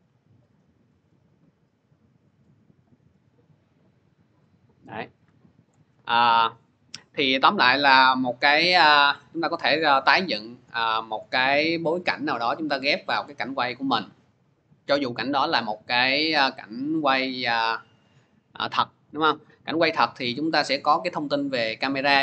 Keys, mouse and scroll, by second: 0.3 click, 5.5 click, 10.4 click, 15.5 click, 20.3-22.2 drag.